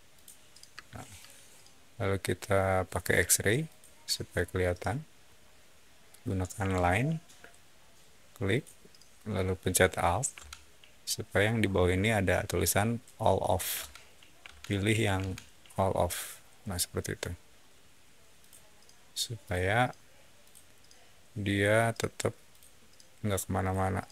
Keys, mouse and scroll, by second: 0.0 click, 0.7 space, 1.0 click, 3.5 click, 4.2 middle click, 4.6 scroll up 1, 6.5 l, 7.0 scroll down 1, 7.1 middle click, 8.4 click, 16.9 alt+middle click, 18.3 alt+click, 19.3 alt+click, 20.3 alt+click, 21.4 alt+click, 22.4 alt+click, 23.5 alt+click.